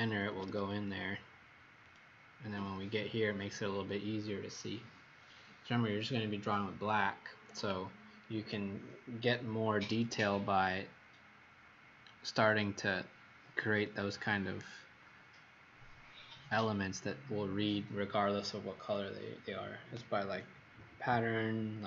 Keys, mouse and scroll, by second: 0.0 Escape, 0.3 Escape, 0.4 Escape, 1.8 click, 10.0 middle click.